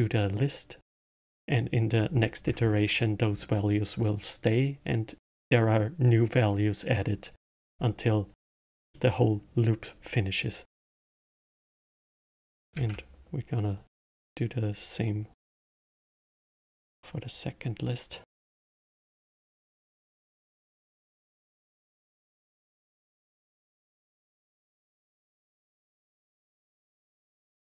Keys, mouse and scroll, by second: 8.8-10.6 middle drag, 10.6 click, 11.2 click, 13.0 shift+d, 14.7 click, 17.0 click, 18.5 click, 18.6-20.7 drag, 21.9-23.3 middle drag, 23.3 click, 25.2 click, 26.1 middle click, 26.6 click.